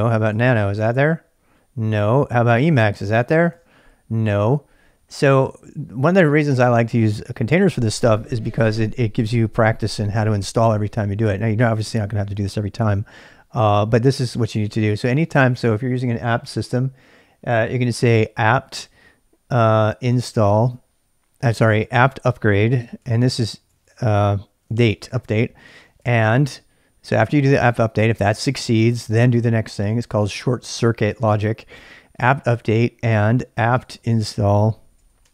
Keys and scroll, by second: 0.0-1.1 typing, 2.3-3.9 typing, 14.8-15.7 typing, 19.6-27.7 typing, 33.4-35.3 typing.